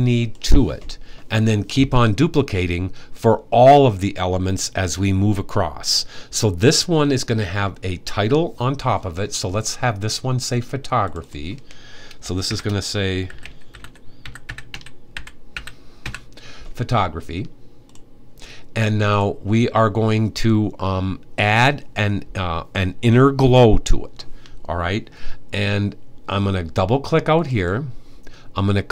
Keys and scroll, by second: 12.1-15.7 typing.